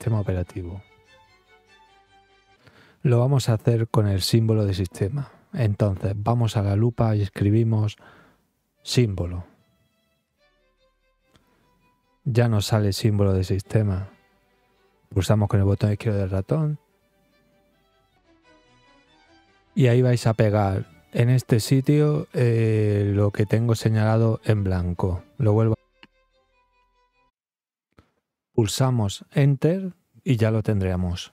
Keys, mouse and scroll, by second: 6.2 click, 7.7 click, 14.3-15.7 drag, 24.1 click, 24.9 click.